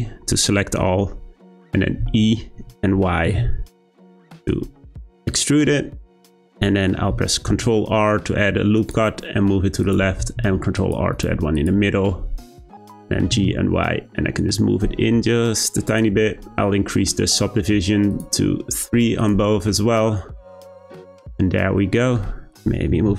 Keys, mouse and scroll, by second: 2.0 e, 6.7 middle click, 7.5 r, 10.3 r, 11.5 click, 12.1 Tab, 12.8 g, 18.1-19.2 drag, 19.5 scroll down 2, 19.7-22.5 middle drag, 22.5 click, 22.9 g.